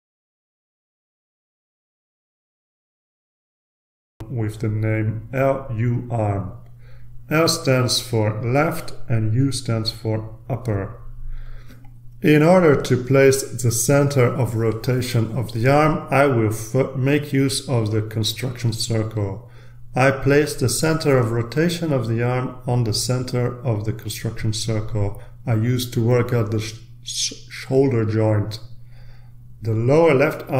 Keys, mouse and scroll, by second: 1.8-3.1 drag, 4.6-5.7 drag, 6.1 l, 8.2-9.9 typing, 10.6 Return, 12.8-17.7 drag, 18.5-20.8 drag, 21.4 right click, 22.8 click, 24.1-25.3 drag, 25.4-27.5 drag, 27.8-28.6 scroll down 1, 29.2-30.5 drag.